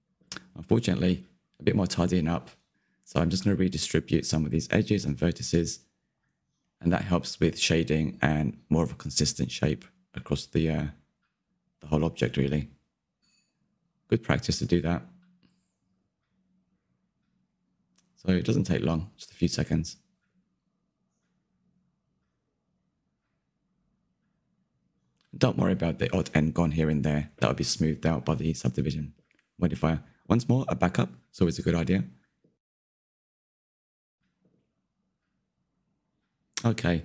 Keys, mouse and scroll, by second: 0.0 scroll up 2, 0.2 middle click, 1.0 click, 1.2 scroll up 2, 1.3 shift+middle click, 2.1 click, 2.6 g, 3.3 click, 3.7 g, 4.3 middle click, 4.8 1, 4.9 click, 5.9 ctrl+KP_3, 6.1 shift+middle click, 6.3-7.6 scroll up 4, 7.6 scroll down 3, 7.9 shift+middle click, 8.4 2, 8.5 Left, 9.1 g, 10.4 Left, 10.9 g, 12.0 Left, 12.5 g, 14.1 scroll down 1, 14.2 shift+middle click, 14.6 click, 15.0 g, 16.3 click, 16.6 g, 17.6 click, 18.1 g, 18.9 click, 19.3 g, 20.0 click, 20.5 g, 21.3 click, 21.7 g, 22.4 click, 22.7 g, 23.5 shift+click, 23.6 shift+click, 24.0 middle click, 24.2 scroll up 1, 24.3 shift+middle click, 24.6 g, 25.2 middle click, 25.9 Tab, 26.0 scroll down 2, 26.3 click, 26.3-27.7 middle drag, 27.7 click, 28.8 shift+d, 31.6 m, 32.6-34.3 middle drag, 34.3-34.6 scroll down 2, 34.6-37.0 shift+middle drag.